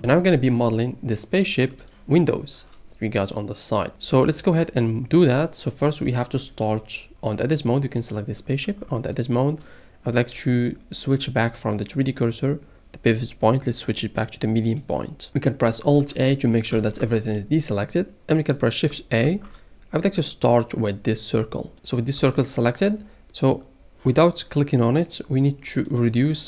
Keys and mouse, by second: 3.9 n, 5.7 click, 8.6 Tab, 11.4-14.8 drag, 15.3 middle click, 16.8 alt+a, 16.9-18.9 middle drag, 19.2 shift+a, 19.6-20.9 middle drag, 22.2 shift+middle click.